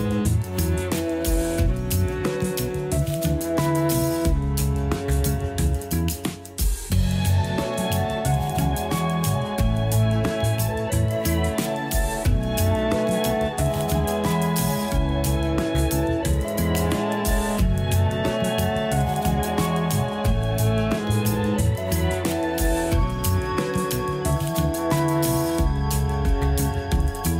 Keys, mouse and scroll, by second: 0.1 a, 0.4 click, 0.6 click, 1.4 ctrl+b, 4.0 a, 4.1 a, 4.3-4.9 scroll down 3, 4.5 Tab, 4.9 a, 5.1 a, 5.5-6.0 shift+middle drag, 6.0 click, 6.6 shift+d, 7.5 g, 8.7-9.1 scroll up 1, 9.1 shift+middle click, 9.5-9.8 scroll up 4, 9.8 g, 10.8-11.2 scroll down 7, 11.6-12.3 scroll up 4, 12.8 g, 13.9-14.3 scroll down 10, 14.3 a, 14.5 a, 14.6-15.0 scroll up 1, 15.0 shift+middle click, 15.2 shift+scroll up 4, 15.9 click, 16.2 g, 17.3 scroll up 1, 17.8 g, 18.8-19.2 scroll down 1, 19.2 a, 19.4 a, 21.0 click, 21.6 shift+d, 22.4-22.8 scroll up 3, 22.8 g, 23.9 Tab, 24.3 a, 24.6 s, 26.1 scroll up 1, 26.5 s.